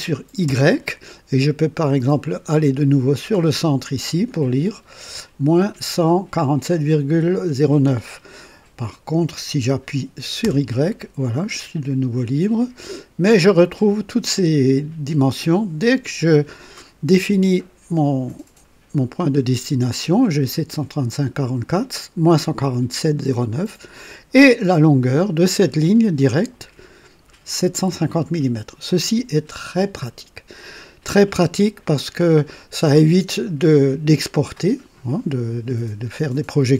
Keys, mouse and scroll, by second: 0.4 y, 10.4 y.